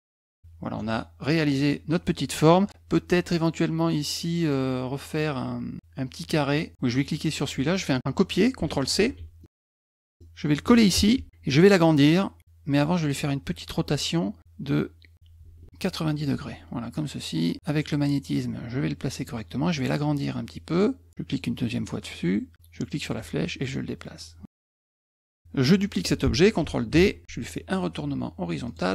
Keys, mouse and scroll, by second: 0.1 click, 1.6 middle click, 1.6 scroll up 1, 2.3 middle click, 2.3 scroll up 1, 6.9 click, 8.9 ctrl+c, 9.6 middle click, 9.6-10.2 scroll, 10.0 middle click, 10.9 ctrl+v, 12.9 click, 15.1-16.2 drag, 16.9-19.2 drag, 21.3 click, 23.1-24.2 drag, 26.9 ctrl+d, 28.7 click.